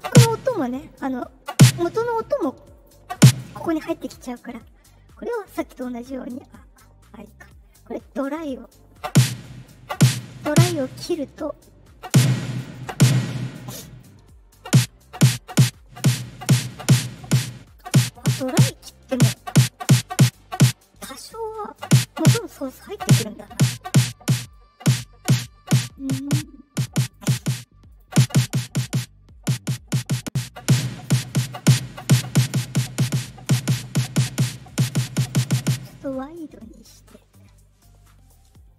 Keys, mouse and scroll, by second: 2.7 click, 7.7-8.6 drag, 11.5-12.6 drag, 13.9-16.3 drag, 17.4 click, 21.3 click, 22.4 click, 24.4-26.7 drag, 27.0 right click, 27.8 click, 28.9-29.9 drag, 30.3-31.6 drag, 33.1-35.2 drag, 37.1-38.7 drag.